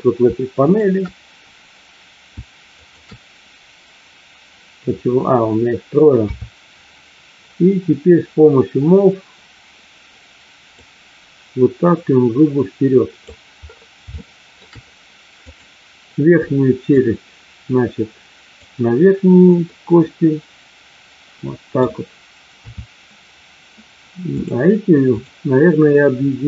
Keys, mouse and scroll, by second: 0.6 shift+click, 2.9 shift+click, 6.1 KP_3, 10.7-13.2 drag, 14.1 shift+middle click, 15.4 click, 16.9-18.6 drag, 19.6-21.9 middle drag, 22.5 KP_3, 24.4 click.